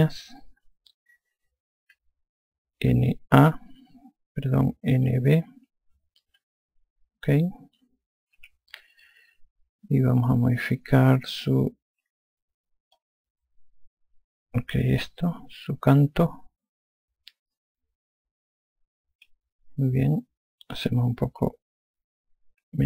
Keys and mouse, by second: 3.8 n, 4.2 a, 5.9 b, 7.1 b, 9.2 e, 13.8 click, 21.7 click.